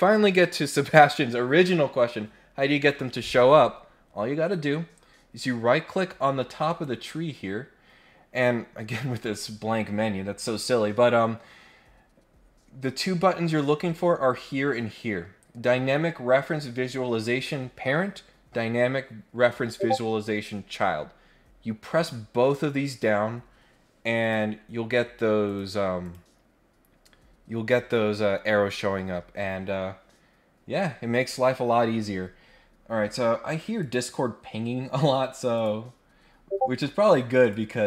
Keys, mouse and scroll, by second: 6.6 right click, 24.2 click, 25.4 click, 26.0 click, 33.8 click, 35.5 click, 37.4 click.